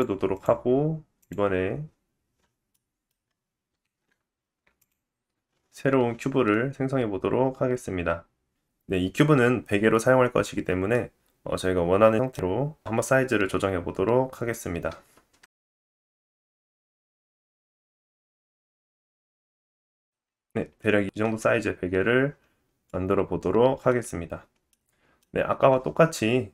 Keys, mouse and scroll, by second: 0.0 middle click, 0.3 click, 1.3-13.7 middle drag, 3.1-3.7 scroll down 2, 3.8 shift+a, 13.7-16.7 drag, 14.3 middle click, 15.1 s, 16.7-18.1 middle drag, 16.9 s, 17.6 s, 18.5 s, 19.6 scroll up 2, 19.7-21.2 middle drag, 21.3 scroll down 2, 21.6-22.4 middle drag, 21.9-22.4 scroll up 3, 23.6 scroll up 2, 24.2 middle click, 24.9 scroll down 1.